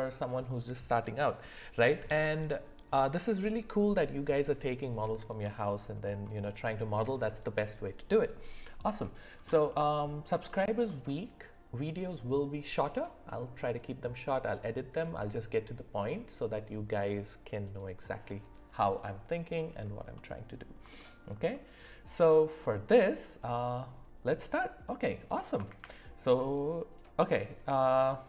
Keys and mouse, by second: 9.7 middle click, 10.5 shift+middle click, 11.0 middle click, 20.1 middle click, 20.9 shift+middle click, 21.5 middle click, 24.6 middle click, 25.6 shift+a.